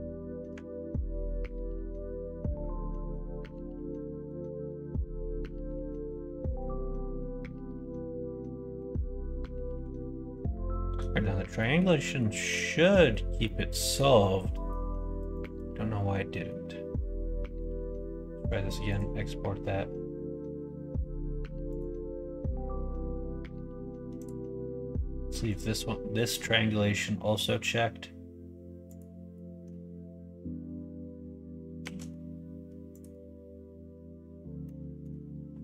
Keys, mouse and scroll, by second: 0.5 Tab, 1.2-3.0 middle drag, 3.9 middle click, 4.9 middle click, 5.8 middle click, 6.3 middle click, 7.3-8.7 middle drag, 9.7 Tab, 10.4 shift+middle click, 11.5 middle click, 12.0 shift+middle click, 12.4 middle click, 12.9 middle click, 13.4 middle click, 14.5 middle click, 16.2 middle click, 17.6 ctrl+s.